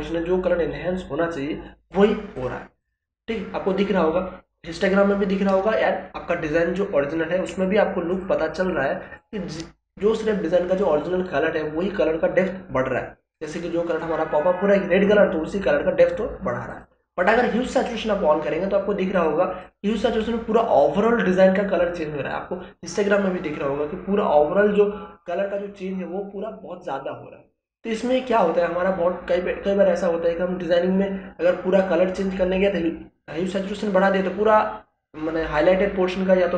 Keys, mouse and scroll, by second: 2.3 click, 8.1 click, 13.3 click, 16.7 click, 28.3 click.